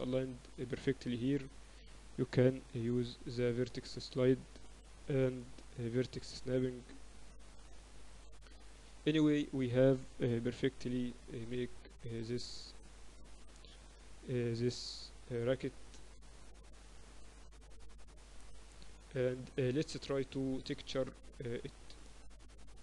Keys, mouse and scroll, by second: 1.9 shift+Tab, 3.1 g, 5.6 g, 7.8-9.7 drag, 9.2 z, 9.7-11.6 middle drag, 11.3 KP_8, 11.6 KP_6, 11.8 KP_6, 12.0 KP_6, 13.6 click, 14.3 x, 16.1 KP_8, 16.5 KP_6, 21.2-22.8 right drag.